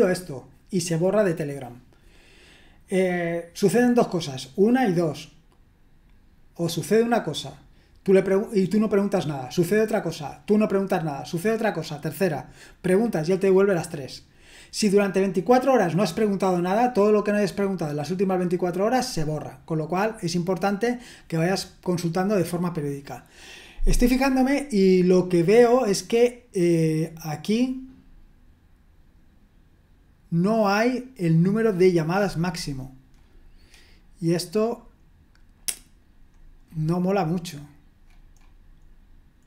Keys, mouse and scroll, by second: 35.5-36.2 scroll up 1, 36.2-37.7 scroll up 1, 37.7-39.4 scroll up 1.